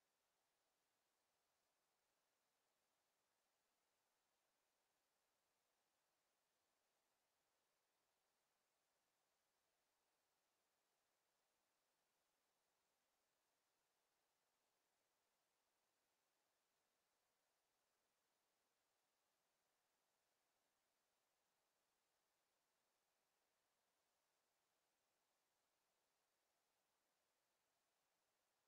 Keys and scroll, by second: 7.6 f, 9.1 f, 12.3 f.